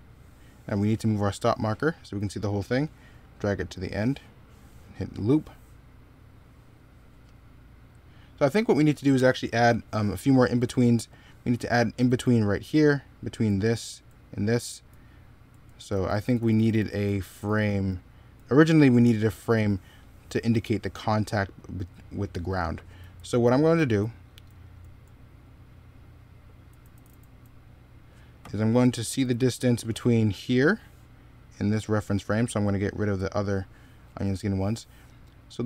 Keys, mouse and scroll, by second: 11.8-16.8 typing, 21.3 middle click, 22.8 z, 23.5 x, 26.5 z, 28.5 x.